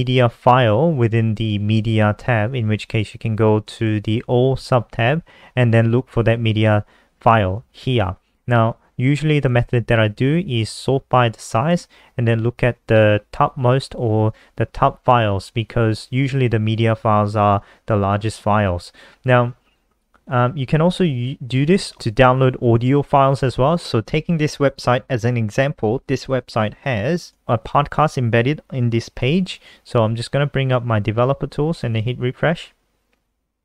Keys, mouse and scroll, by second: 23.6-24.5 scroll down 5, 24.8-26.2 scroll down 5, 26.9 scroll down 1, 28.3 click, 28.5 scroll down 1, 30.0 F12, 31.6 click, 31.9 ctrl+r.